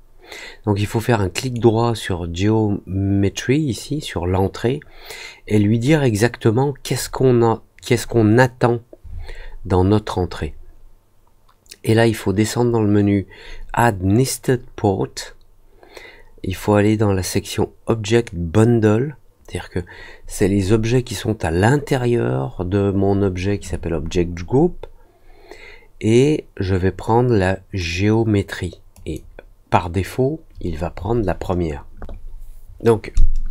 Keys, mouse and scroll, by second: 1.3 right click, 28.9 click.